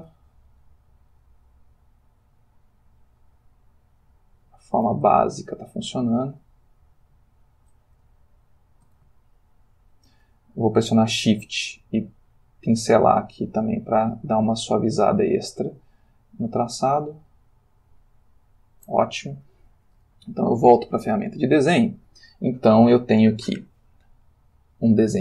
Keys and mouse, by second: 1.0 f, 1.1 click, 2.2-3.2 drag, 3.5-5.1 drag, 5.5 ctrl+middle click, 6.7 click, 8.2 ctrl+middle click, 9.3-10.4 ctrl+shift+middle drag, 12.0-14.4 shift+drag, 14.9-16.1 shift+drag, 16.6 shift+click, 17.3 shift+click, 18.0 shift+click, 20.6 click, 21.3 click.